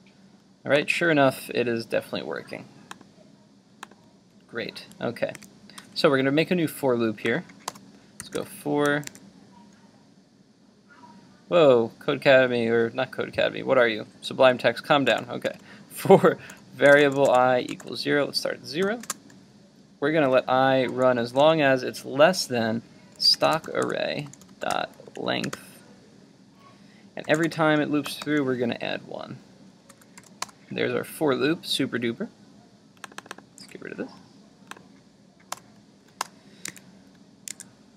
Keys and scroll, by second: 5.4 super+Tab, 14.1 super+z, 33.6 super+x.